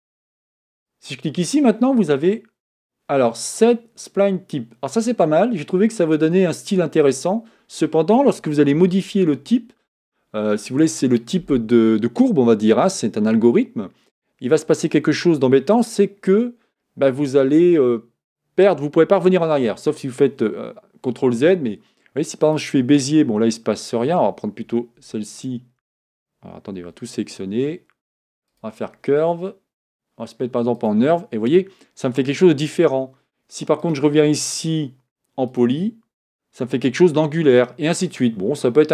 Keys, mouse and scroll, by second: 0.8-3.9 drag, 25.0 Tab, 25.3 click, 25.8 Tab, 26.9 a, 28.5-31.6 drag, 33.8-36.9 drag.